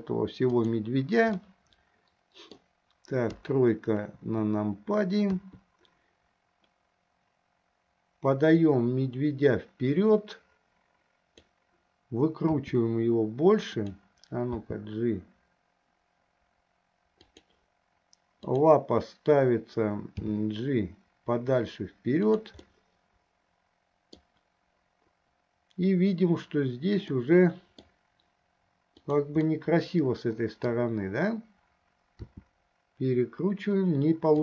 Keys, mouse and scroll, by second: 1.5-2.8 middle drag, 3.6 KP_3, 4.2 KP_3, 5.4 KP_3, 8.6 click, 8.9-11.9 drag, 12.8 r, 14.8 g, 18.8 click, 20.4 g, 22.9-24.6 middle drag, 27.3-28.3 middle drag, 29.2 click, 29.9-31.3 middle drag, 32.5 r.